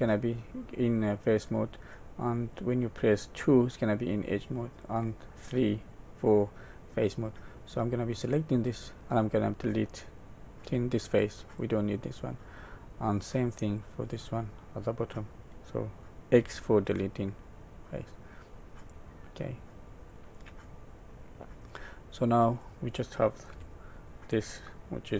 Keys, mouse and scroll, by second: 2.5 click, 4.8 click, 8.1 click, 10.6 x, 12.4 middle click, 13.8 click, 16.4 x, 19.8 click, 20.9 middle click, 23.5 Tab.